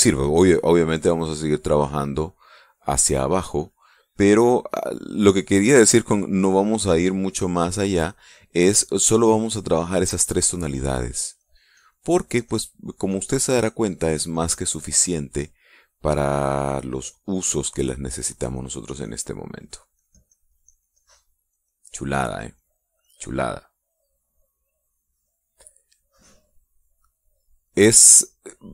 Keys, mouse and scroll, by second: 0.0 click, 0.5 middle click, 1.6-4.1 drag, 4.1-7.0 drag, 8.0-9.6 drag, 9.6-11.2 drag, 11.6-13.4 drag, 13.6-16.7 drag, 17.3-19.2 drag, 19.2-20.3 drag, 20.3-21.9 drag, 22.0 click, 22.9-24.0 drag, 25.5 click, 27.8-28.7 drag.